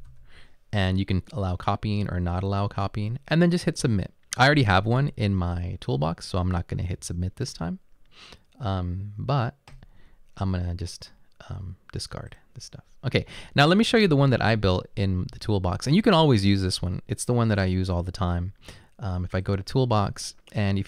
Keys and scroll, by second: 0.0-0.6 typing.